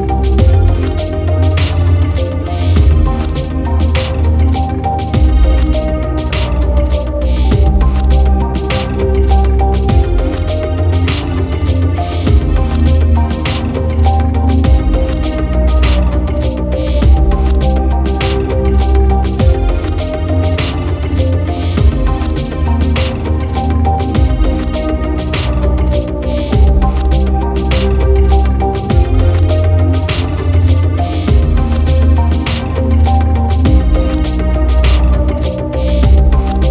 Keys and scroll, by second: 30.1 ctrl+j, 30.8 ctrl+t.